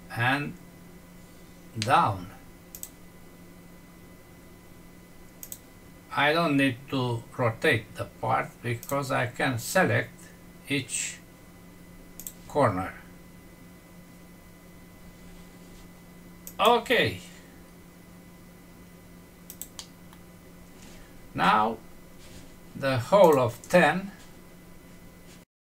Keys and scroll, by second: 19.7 F6.